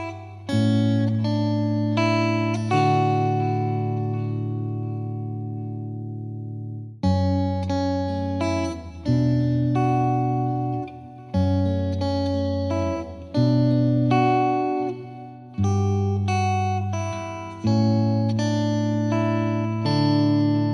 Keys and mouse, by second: 0.1 click, 0.6 click, 1.0 click, 2.2 click, 2.6 Delete, 3.0 click, 3.6 click, 4.0 click, 4.8 click, 5.6 click, 5.9 click, 6.6 click, 8.2 click, 8.9 click, 9.1 click, 9.9 click, 10.3 shift+click, 10.7 click, 11.3 right click, 12.4 click, 12.5 click, 12.8 click, 13.3 click, 13.7 click, 14.1 click, 14.9 F3, 15.2 click, 15.4 F3, 15.6 F2, 15.9 click, 16.2 click, 17.0 click, 18.9 click, 19.9 click, 20.5 right click.